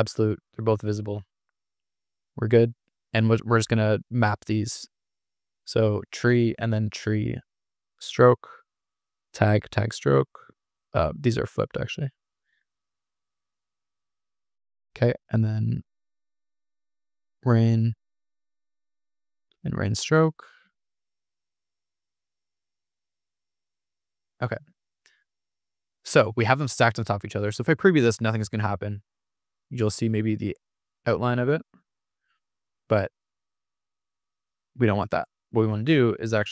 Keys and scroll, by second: 30.4 super+r, 32.7 super+r, 35.5 Escape.